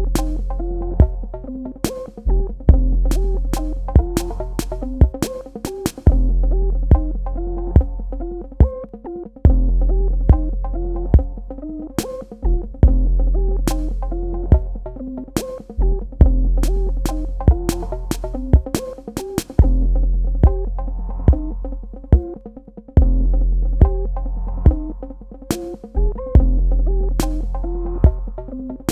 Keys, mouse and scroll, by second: 0.0 space, 0.1 click, 0.4 alt+click, 0.8 space, 1.1 ctrl+click, 1.8 space, 2.0 ctrl+alt+click, 2.3 click, 3.6 space, 3.6 click, 3.8 space, 4.0 click, 4.8 alt+shift+click, 5.2 space, 5.7 click, 6.2 click, 6.8 space, 8.7 click, 8.8 space, 9.0 click, 9.8 space, 10.1 click, 10.6 space, 10.6 click, 10.8 space, 11.3 click, 11.9 click, 16.3 v, 17.0 click, 22.2 i, 23.1 click, 23.8 v, 24.3 click, 25.0 i, 26.0 click, 26.2-28.4 typing, 26.4 click, 27.2 click, 27.9 click, 28.0 click.